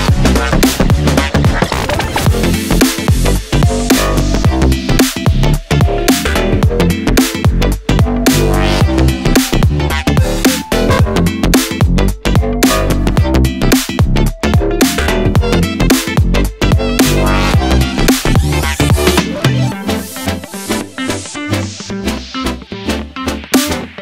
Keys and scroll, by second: 9.2 ctrl+d.